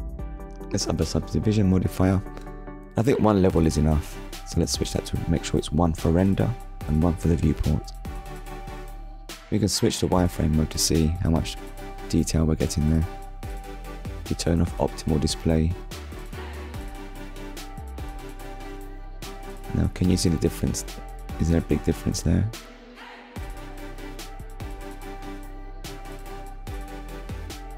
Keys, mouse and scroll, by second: 0.4 click, 1.7 scroll up 1, 4.3 click, 6.7 click, 9.3 click, 10.8 click, 12.2 click, 15.3 click, 17.5 middle click, 18.2 scroll down 1, 18.8 shift+middle click, 20.1 click, 23.2 click, 24.3 click, 26.0 middle click.